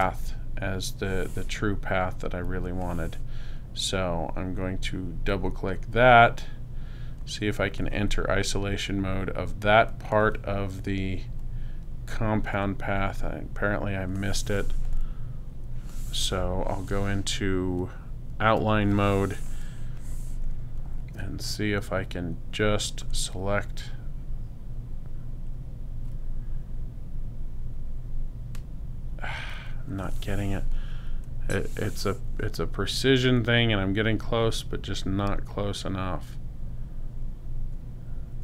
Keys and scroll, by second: 18.6 super+y.